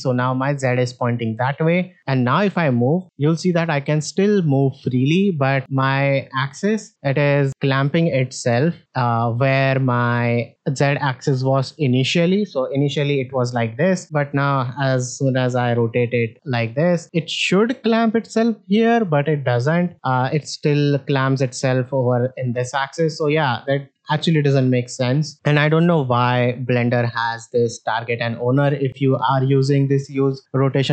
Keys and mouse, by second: 0.0-0.3 middle drag, 1.9-4.7 drag, 5.2-5.5 middle drag, 5.6 click, 6.7-8.8 drag, 8.9 middle click, 13.1 alt+r, 14.6 r, 17.0 middle click, 17.5-19.7 drag, 20.2-21.6 drag, 21.9 middle drag, 22.5 click, 25.1-26.0 drag.